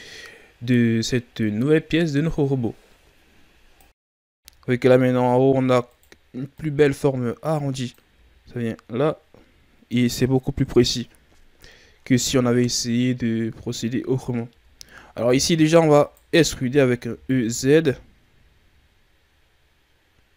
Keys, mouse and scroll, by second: 0.8 click, 2.0 Tab, 2.8 KP_3, 3.7-4.3 scroll down 6, 4.3-5.2 scroll up 6, 5.2 Tab, 5.8 right click, 6.4 click, 8.0 Tab, 9.7 scroll down 4, 10.5 KP_1, 11.6-12.7 shift+scroll down 4, 12.7-13.7 shift+scroll down 4, 13.7-14.4 shift+scroll down 3, 14.4 Tab, 15.9 alt+right click, 17.0 e.